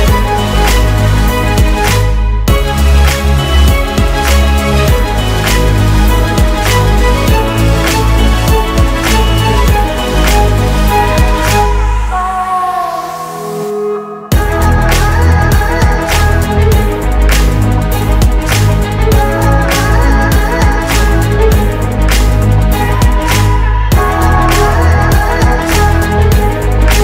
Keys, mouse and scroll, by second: 0.1-1.9 typing, 2.6 Return, 10.3 double click, 10.6 ctrl+space, 11.7-12.1 typing, 12.7 Return, 23.0 shift+Down, 24.1 shift+Left, 25.1 Down, 25.8 Right.